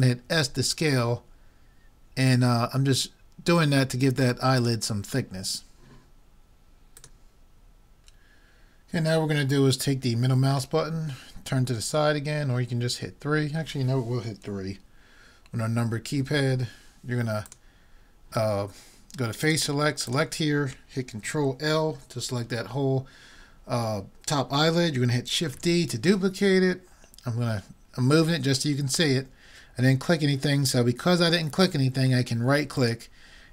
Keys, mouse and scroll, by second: 0.3 s, 7.0-8.9 drag, 10.7-11.9 middle drag, 12.4 middle click, 16.3 KP_3, 17.5-19.3 drag, 19.5-21.9 drag, 22.0 ctrl+l, 25.6 shift+d.